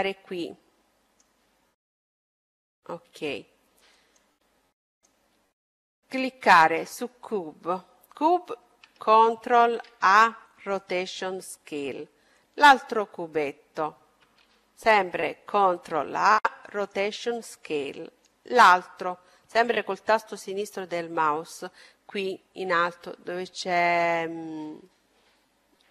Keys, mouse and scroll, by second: 2.1-6.8 drag, 10.8 ctrl+a, 12.4-14.2 drag, 16.9 ctrl+a, 18.2-19.8 drag.